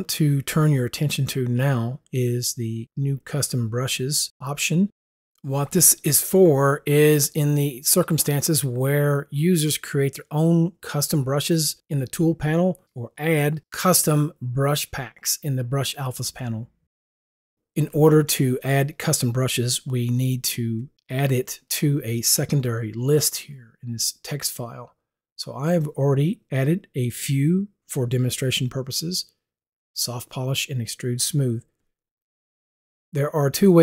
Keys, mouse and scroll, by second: 20.8 click.